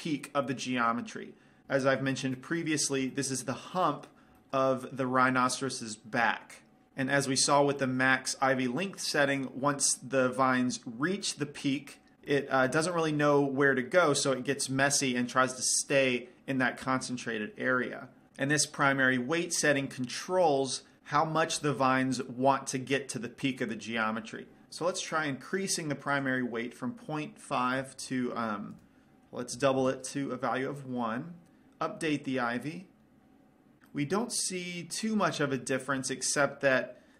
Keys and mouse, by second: 6.9 middle click, 9.7-16.3 middle drag, 20.3 middle click, 22.1-26.5 middle drag, 26.5-28.3 drag, 33.1 click, 34.3-37.1 middle drag.